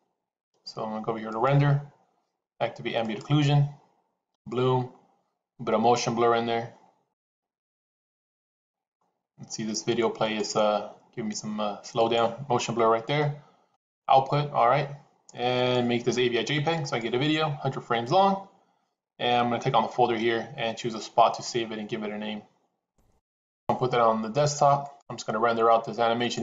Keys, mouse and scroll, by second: 4.3-5.9 drag, 8.0 click, 9.1 click, 10.4 click, 12.2 click, 13.7 click, 15.4-17.3 drag, 24.7-26.4 drag.